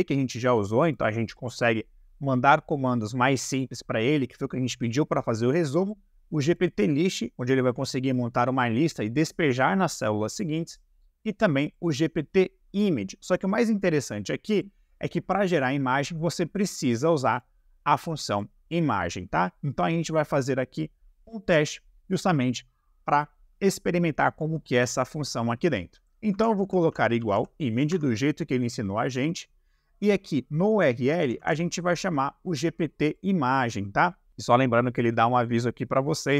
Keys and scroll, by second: 26.3-27.3 typing, 27.9 Tab, 31.1 g, 31.2 p.